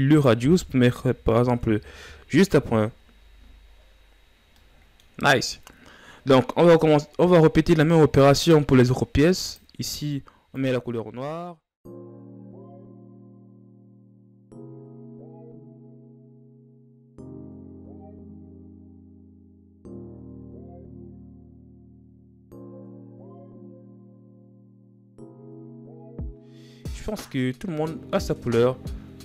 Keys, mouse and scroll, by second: 1.3-4.1 drag, 4.1 scroll down 10, 5.7-8.0 middle drag, 8.0-10.4 right drag, 10.4-11.6 drag, 11.6 right click, 12.0 click, 12.2 shift+z, 12.3 shift+scroll up 4, 12.7 click, 12.9 shift+scroll down 3, 13.1 right click, 13.5 click, 13.7 right click, 14.1 click, 14.5 click, 14.6 right click, 14.8 scroll up 10, 15.1 right click, 15.4 click, 15.5 scroll down 1, 16.0 click, 16.0 scroll down 5, 16.3 right click, 16.5 click, 16.6-16.9 shift+scroll up 7, 16.9 right click, 17.1 click, 17.3 right click, 17.6 click, 17.8 ctrl+scroll down 1, 17.9 scroll up 3, 18.0 right click, 18.3 drag, 18.4 ctrl+scroll down 1, 18.4 scroll up 1, 18.7 right click, 19.2 click, 19.5 right click, 19.8 click, 19.9 scroll down 12, 20.1 middle click, 20.6 click, 20.8 right click, 21.0 click, 21.8 click, 21.9 right click, 22.1 click, 22.2 middle click, 22.4 right click, 22.8 click, 23.2 shift+scroll up 6, 23.3 right click, 23.9 click, 24.1 shift+scroll down 1, 24.4 click, 24.5-25.0 scroll up 5, 24.6 middle click, 25.0 middle click, 25.1 right click, 25.3 click, 25.4 scroll down 5, 25.5 middle drag, 25.6 right click, 26.0 click, 26.1 middle click, 26.5-27.1 middle drag, 27.1 scroll down 1, 27.3-27.8 shift+scroll up 5, 28.5-28.9 shift+scroll up 4, 29.0-29.2 middle drag.